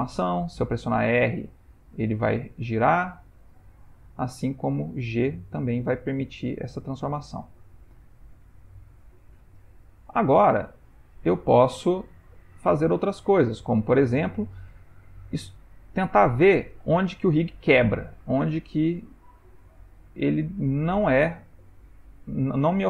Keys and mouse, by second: 1.0 r, 4.7 g, 15.0 ctrl+middle click, 15.6 shift+middle click, 16.8 g.